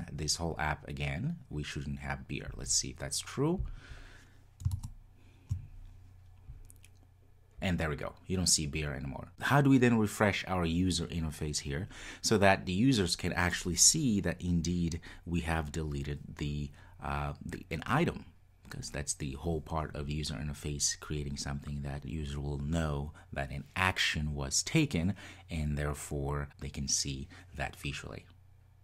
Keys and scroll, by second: 3.7 ctrl+r, 4.4 ctrl+r.